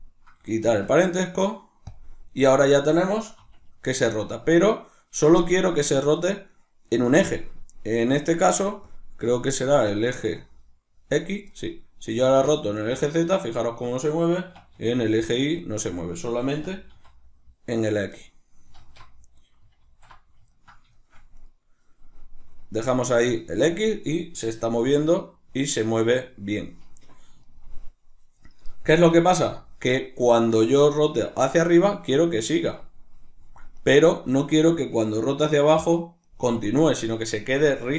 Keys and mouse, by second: 2.4 right click, 3.0 r, 4.0 right click, 4.5 right click, 9.5 right click, 9.8 r, 10.9 right click, 11.8-13.4 middle drag, 11.8 r, 13.4 right click, 14.1 r, 15.6 right click, 16.2 r, 17.9 right click, 18.4 alt+q, 20.1-21.0 ctrl+middle drag, 21.0 right click, 23.4 right click, 24.5 r, 27.1 right click, 28.7 r, 30.4 right click, 30.7 r, 33.5 right click, 33.9 r, 36.0 right click.